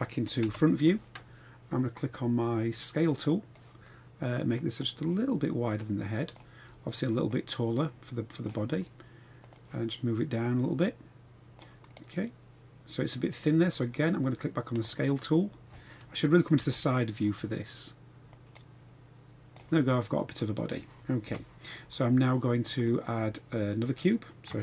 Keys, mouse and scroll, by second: 0.5 KP_1, 3.1 click, 3.6-4.5 scroll down 1, 4.7 click, 4.9-6.4 drag, 7.3-8.5 drag, 9.4 click, 10.4-11.5 drag, 11.9-13.7 middle drag, 14.7 click, 16.5 KP_3, 18.3 click, 18.5-19.5 drag, 19.9-20.7 middle drag, 21.2 KP_1, 22.0 scroll down 2.